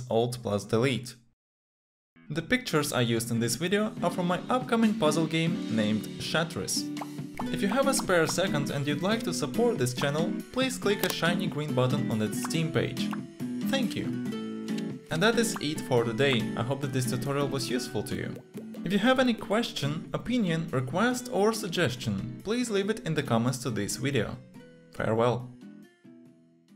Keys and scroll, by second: 0.6 alt+Delete.